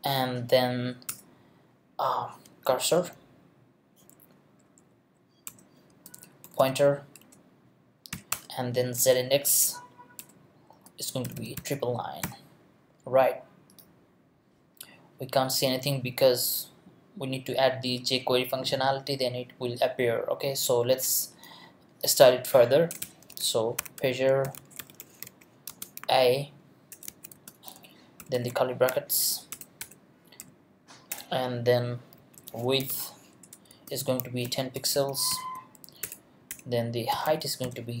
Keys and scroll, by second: 1.1 Return, 2.7 c, 3.0 u, 4.8 Down, 5.5 Return, 5.9 space, 6.4 p, 12.4 ;, 22.9 Return, 23.8-28.3 typing, 28.9 shift+Left, 29.5 Return, 29.8 BackSpace, 35.7-38.0 typing, 36.5 Return.